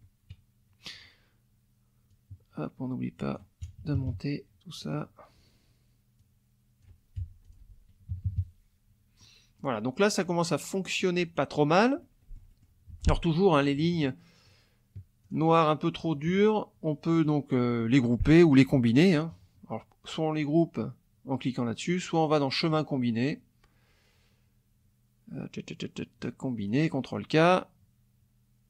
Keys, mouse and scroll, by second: 2.1-3.5 drag, 3.6 KP_Subtract, 4.8 click, 6.2 click, 7.1 F1, 7.4 click, 8.1 KP_Subtract, 9.2 click, 10.2 click, 10.8 middle click, 11.4 middle click, 12.0 middle click, 12.9 F2, 13.5 shift+click, 14.4 shift+click, 15.2 shift+click, 16.0 shift+click, 17.1 middle click, 22.6 click, 26.6 click.